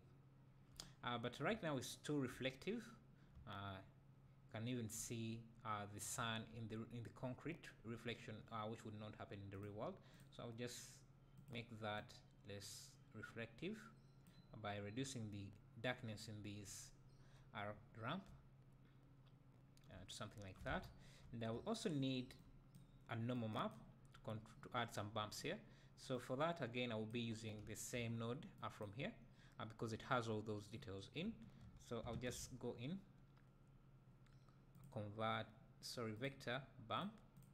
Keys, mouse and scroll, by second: 1.0 scroll up 2, 1.6 `, 3.3-4.4 middle drag, 6.1 middle click, 9.5 click, 11.4-18.2 drag, 18.2 `, 20.1-23.3 scroll down 2, 23.3-28.7 drag, 24.2-25.3 scroll up 2, 25.3-28.7 middle drag, 25.3-26.0 scroll up 1, 26.0 scroll up 1.